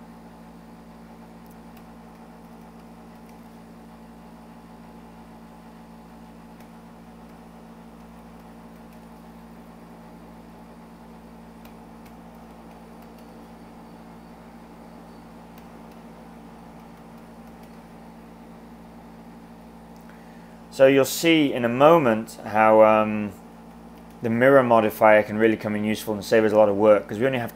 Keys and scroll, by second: 1.5-3.6 typing, 6.6-9.2 typing, 11.6-13.5 typing, 15.5-17.9 typing, 21.1-21.9 typing, 23.2-24.4 typing.